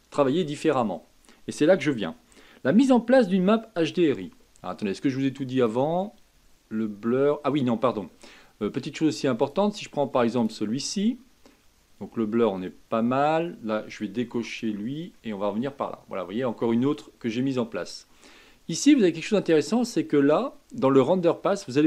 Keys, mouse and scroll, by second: 5.5-8.5 drag, 14.5 click, 15.1-18.1 middle drag, 19.4-21.8 drag.